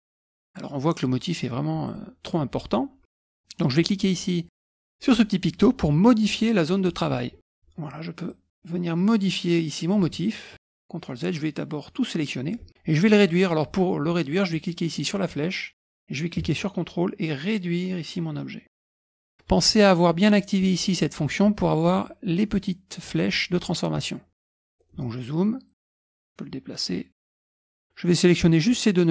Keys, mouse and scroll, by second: 0.2 click, 1.8 click, 6.8 click, 8.3-10.5 drag, 10.6 ctrl+z, 11.3-12.6 drag, 15.3-19.3 drag, 24.6 middle click, 24.6-25.4 scroll up 1, 26.2-27.5 drag, 27.5 scroll up 1, 27.7 click, 28.3 click.